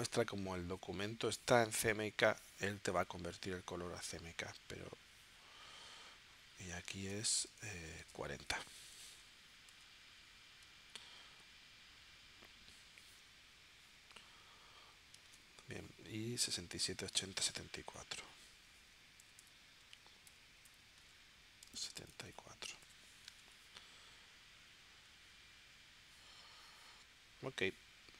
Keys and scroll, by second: 6.9 super+Tab, 8.7 4, 9.7 Tab, 15.2 super+Tab, 17.2 super+Tab, 19.2 6, 21.7 super+Tab, 22.9 4.